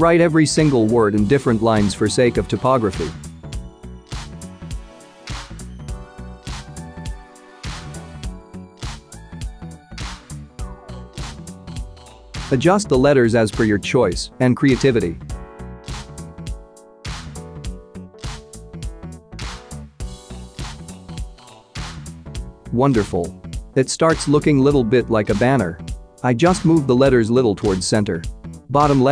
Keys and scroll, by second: 0.3 ctrl+v, 1.7 ctrl+c, 2.8 ctrl+v, 4.1 ctrl+c, 5.5 ctrl+v, 6.8 ctrl+x, 8.4 ctrl+v, 9.7 Delete, 10.1 BackSpace.